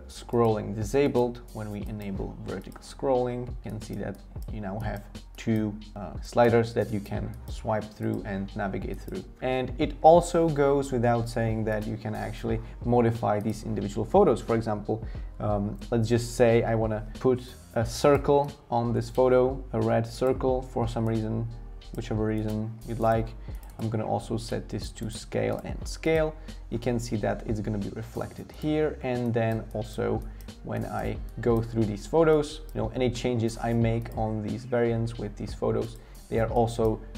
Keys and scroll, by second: 9.4 BackSpace.